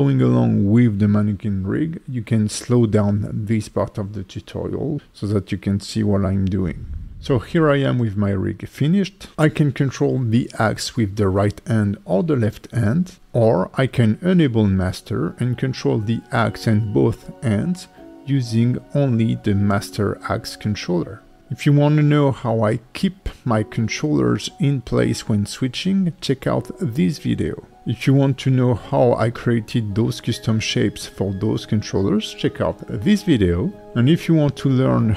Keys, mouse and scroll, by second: 1.1 right click, 2.3 right click, 3.4 right click, 4.6 right click, 5.0 right click, 7.1 middle click, 7.4 shift+middle click, 7.6 shift+middle click, 7.8 click, 8.4 g, 9.6 right click, 11.3 click, 11.6 click, 12.0 g, 12.7 right click, 13.4 click, 14.3-15.1 scroll up 6, 15.3 click, 15.7 click, 16.4 click, 17.2 shift+click, 17.5 shift+click, 18.1 shift+click, 18.9 shift+click, 19.2 shift+click, 19.5 click, 19.7-20.2 scroll down 5, 20.2 click, 20.6-22.3 scroll up 7, 22.4 click, 23.4 click, 23.9 g, 24.9 right click, 25.2 scroll down 1, 25.5 alt+middle click.